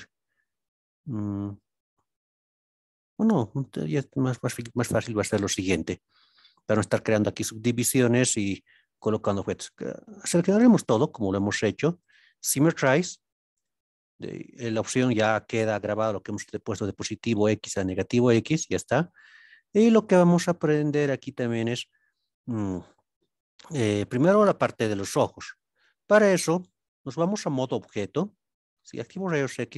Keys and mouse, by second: 4.4 KP_1, 12.0-13.6 drag, 27.8 Tab, 28.9 alt+z.